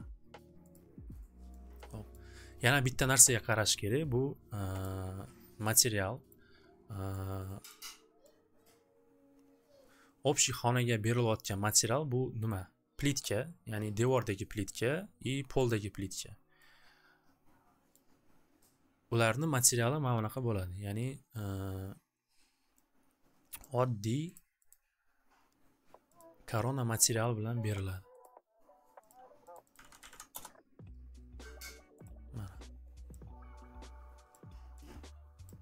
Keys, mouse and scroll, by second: 0.7 click, 2.1 click, 4.8 click, 6.1 click, 6.3 click, 7.6 click, 8.5 scroll, 11.5 click, 12.4 click, 14.1 click, 14.7 click, 15.7 click, 17.9 click, 23.7 click, 24.5 click, 24.7 right click, 26.1 click, 27.2 click, 28.2 click, 29.1 click, 29.5-30.7 typing, 29.6 click, 29.7 click, 31.7-32.5 typing, 32.0 click, 34.1-35.2 typing, 34.3 click, 35.4 click.